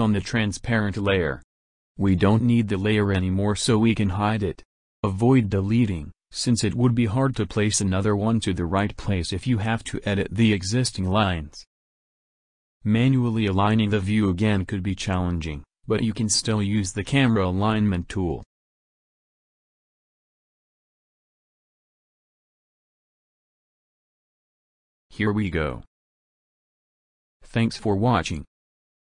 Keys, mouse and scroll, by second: 5.4 click, 6.9-8.8 middle drag, 11.9-17.5 drag, 20.1 click, 21.1 click, 23.4 click, 24.3 click.